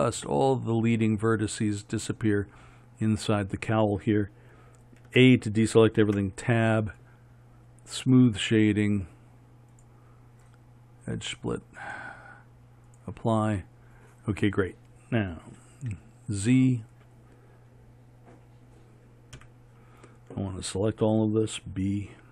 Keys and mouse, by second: 5.2 a, 6.2 Tab, 8.2-12.0 drag, 13.1 click, 14.0 right click, 14.2-15.6 drag, 15.6 middle click, 16.0 z, 19.5 KP_1, 21.6 b.